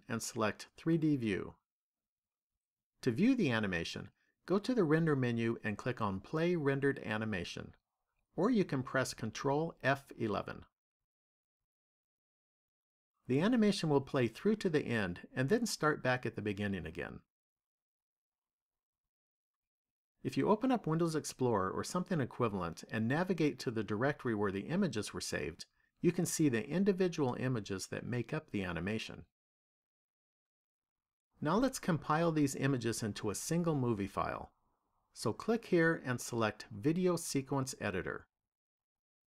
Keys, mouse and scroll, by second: 2.2 click, 6.1 click.